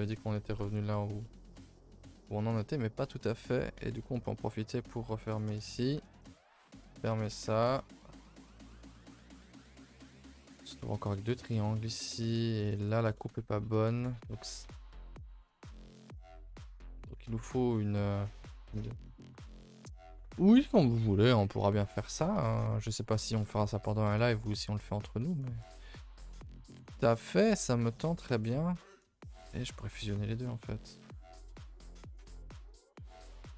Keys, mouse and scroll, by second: 0.0 middle click, 0.1 a, 0.3 a, 0.4-0.8 scroll down 2, 0.8 middle click, 1.9 middle click, 2.8 scroll up 2, 3.0 a, 3.1 a, 3.2 middle click, 3.8 k, 5.7 middle click, 6.0 2, 6.2 click, 6.9 ctrl+Delete, 7.1 a, 7.2 a, 7.6 ctrl+s, 7.8-11.2 middle drag, 11.7-12.8 middle drag, 12.9 shift+middle click, 13.6 scroll up 1, 13.7 a, 13.9 a, 14.1 ctrl+z, 14.3 ctrl+z, 15.1 ctrl+z, 16.1 click, 16.3 middle click, 17.3 middle click, 17.4 a, 17.7 middle click, 18.1-20.9 middle drag, 21.1 middle click, 21.6 middle click, 22.2 scroll up 2, 22.3 a, 22.6 middle click, 23.0 scroll down 2, 23.3 middle click, 23.7 middle click, 23.9 middle click, 24.5 middle click, 25.1 1, 25.3 middle click, 25.6 click, 25.8 middle click, 26.4 g, 27.1 middle click, 28.3-29.4 middle drag, 29.4 shift+click, 29.9-32.4 right drag, 32.4 a, 32.6 middle click.